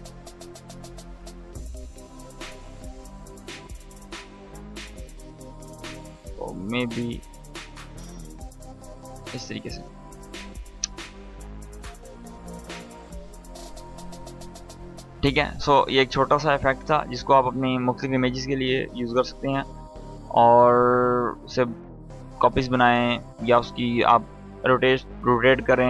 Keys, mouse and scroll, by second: 1.2 click, 3.2 space, 5.6 click, 7.1 space, 9.1-9.7 click, 9.6 space, 11.0-11.9 drag, 12.6 space, 14.7 space.